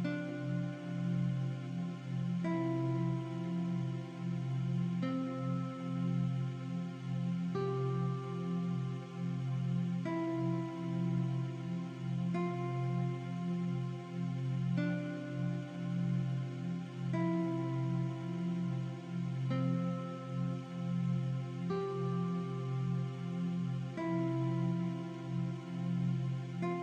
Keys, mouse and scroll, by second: 0.1-2.1 typing, 3.5-4.3 typing, 4.9 click, 6.8 click, 7.9 alt+Right, 9.9 shift+Left, 13.7 click, 13.9-14.3 alt+shift+scroll down 2, 14.9-15.2 alt+shift+scroll up 2, 15.2 click, 16.2 Up, 17.3 click, 17.8 scroll down 1, 18.0-18.4 scroll up 2, 19.1 click, 22.5 click, 23.5 click, 26.4 click.